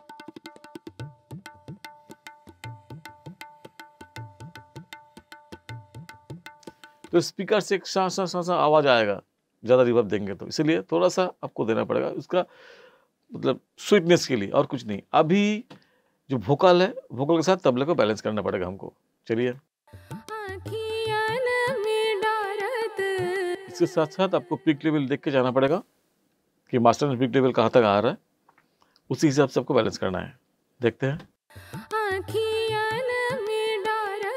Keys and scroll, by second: 7.1 space, 19.8 space, 23.5 space, 31.4 space.